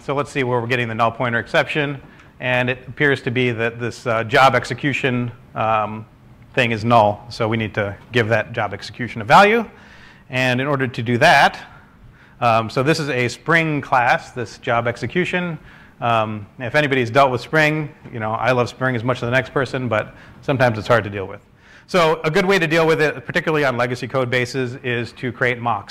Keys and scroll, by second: 19.9 typing, 21.4 BackSpace, 23.0 ctrl+space.